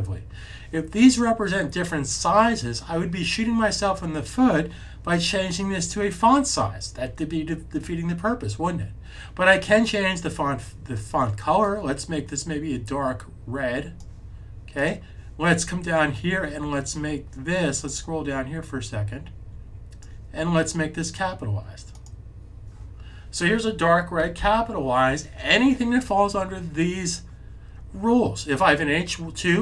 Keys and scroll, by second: 24.3 super+s.